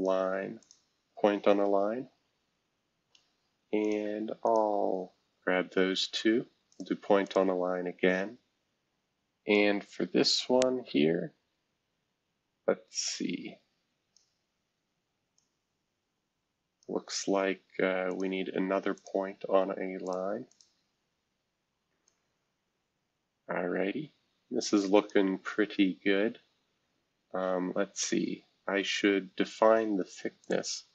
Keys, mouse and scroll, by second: 0.6 click, 3.8 click, 4.4 ctrl+click, 6.7 click, 7.2 click, 9.5-14.2 drag, 15.3-16.8 drag, 18.1 click, 18.9 ctrl+click, 20.0 click, 20.5 click, 22.0-25.1 drag, 25.5 scroll down 2, 26.0 scroll down 2, 26.5 scroll up 2, 28.1 scroll up 2, 30.4 click.